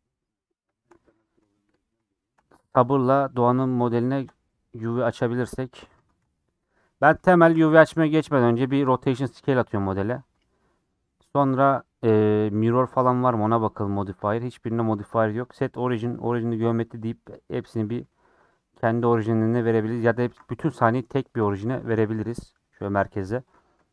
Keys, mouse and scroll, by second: 0.2 middle click, 0.4-1.1 scroll up 6, 0.7 shift+middle click, 1.1-5.0 middle drag, 5.0 click, 5.3 a, 6.0 Tab, 6.9 Tab, 7.3 ctrl+a, 9.4-11.2 middle drag, 11.2-13.3 right drag, 13.3 click, 14.2-15.0 scroll down 7, 15.0 middle click, 15.3-16.8 right drag, 16.8-17.9 middle drag, 17.9 g, 18.9 click, 19.2 g, 19.7 a, 21.7 KP_1, 22.7 KP_3, 23.3 click, 23.6-23.9 middle drag.